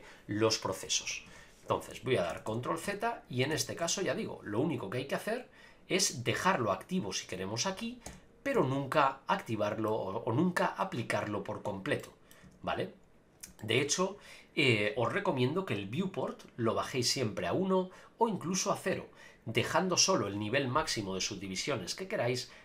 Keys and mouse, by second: 1.9-4.4 ctrl+z, 8.1 Tab, 8.5 a, 8.9 middle click, 12.0 middle click, 12.4 Tab, 13.6 shift+middle click, 15.8-18.7 drag.